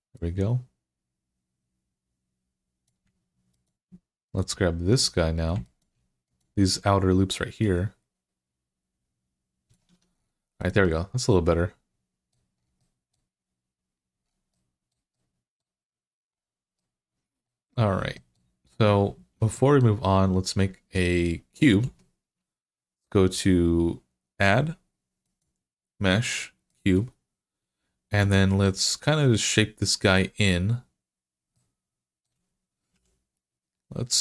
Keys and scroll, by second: 9.7 Tab, 21.7 shift+a, 32.7 s.